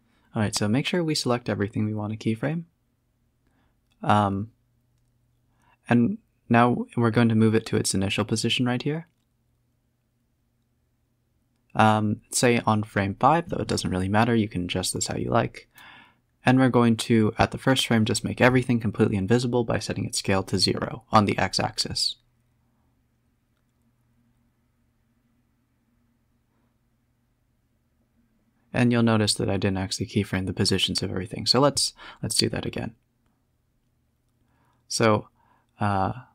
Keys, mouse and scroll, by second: 0.3 click, 1.2-3.2 drag, 3.2 s, 5.5 click, 6.5 shift+click, 7.6 s, 10.2-10.6 scroll up 6, 10.6 s, 14.0-16.1 drag, 16.1-16.4 scroll down 3, 16.4 shift+click, 16.9 s, 19.3-19.8 scroll down 1, 19.8 scroll down 1, 21.0-22.1 drag, 22.7 scroll up 2, 23.3-25.6 drag, 26.7 scroll up 1, 27.0-27.4 middle drag, 27.4 scroll down 1, 27.6-28.0 middle drag, 28.0 s, 29.6 ctrl+z, 29.9 ctrl+z, 30.6-31.6 middle drag, 31.6 s, 33.2-35.2 drag, 35.2 s.